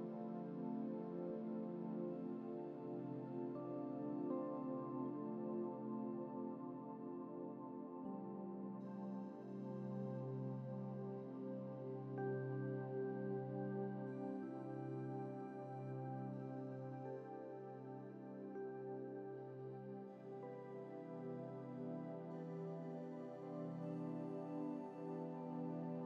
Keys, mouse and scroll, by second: 0.1-0.6 scroll down 1, 0.6-1.2 scroll down 1, 1.8-2.9 scroll up 3.